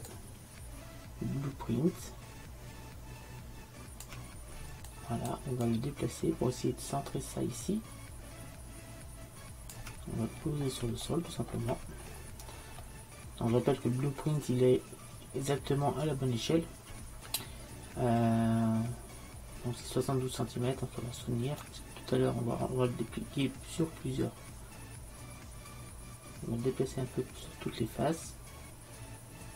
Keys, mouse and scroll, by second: 0.2-2.1 drag, 4.9-7.7 drag, 10.5-12.8 middle drag, 14.8-16.0 middle drag, 21.7-23.6 drag.